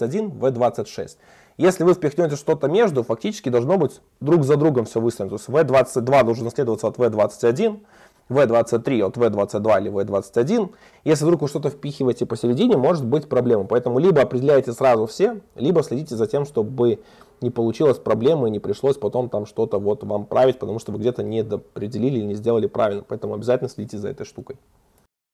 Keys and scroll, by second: 25.0 super+1.